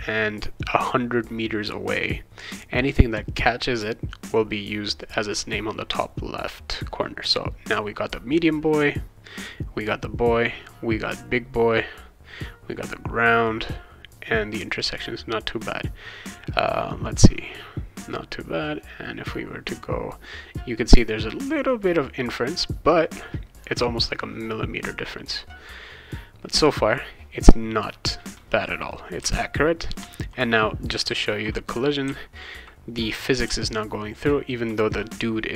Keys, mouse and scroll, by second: 29.2 w, 30.0 a, 31.0 w, 32.0 w, 33.1 w, 33.4 d.